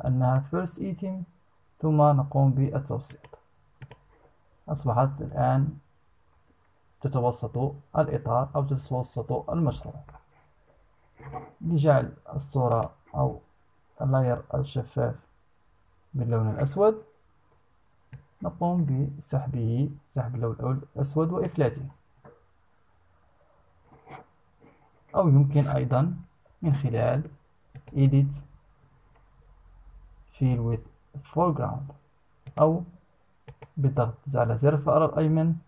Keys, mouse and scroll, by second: 2.6 click, 3.3 click, 12.2 click, 17.7-21.2 drag, 26.0 ctrl+z, 27.3 click, 32.0 click, 33.0 right click.